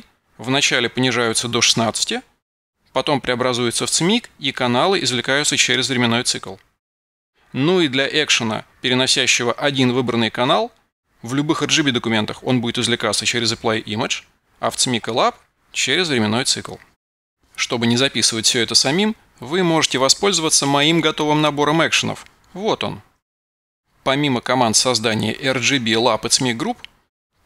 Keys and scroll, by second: 19.1 F12.